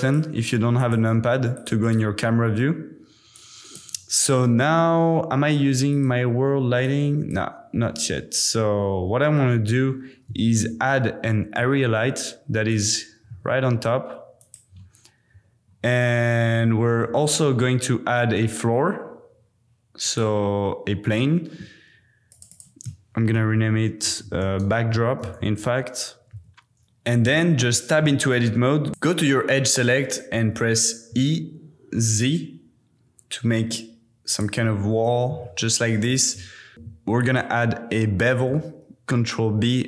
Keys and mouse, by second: 1.8 middle click, 3.3-7.5 middle drag, 10.4 shift+a, 13.2 g, 13.3 z, 14.4 click, 17.2 shift+a, 22.3 click, 22.5-26.8 middle drag, 24.2 BackSpace, 28.0 Tab, 28.9-31.1 middle drag, 31.1 e, 32.1 z, 34.3 click, 35.4 Tab, 36.1 g, 36.3 y, 36.7 Tab, 37.2 click, 38.8 super+b.